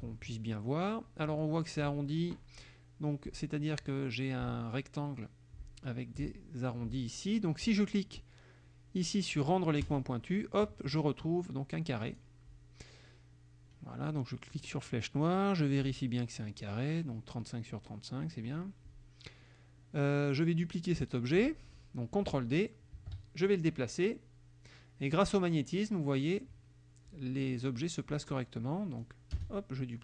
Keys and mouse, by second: 9.9 click, 12.1 click, 14.6 click, 15.3 click, 23.0 ctrl+d, 23.5-25.4 ctrl+drag, 29.0-30.0 drag, 29.4 space.